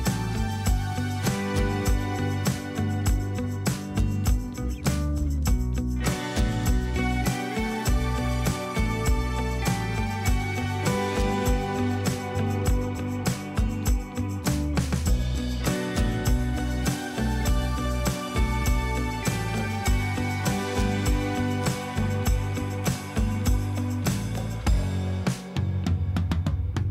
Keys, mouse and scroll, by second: 0.5 Return, 3.2 double click, 6.4 double click, 8.4 alt+click, 11.5 alt+scroll up 1, 11.9 space, 12.5 alt+scroll up 1, 12.6-12.9 alt+scroll down 2, 17.7 Return, 19.5 alt+scroll down 1, 20.4 alt+scroll down 1, 20.7-23.3 alt+scroll up 2, 25.1-26.9 typing.